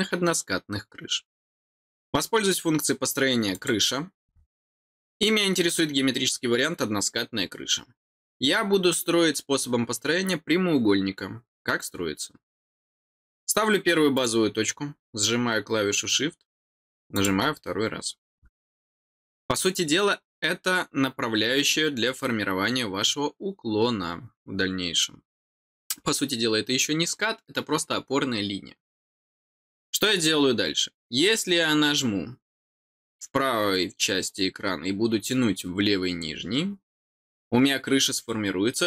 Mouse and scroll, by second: 3.5 click, 14.1 click, 17.1 click.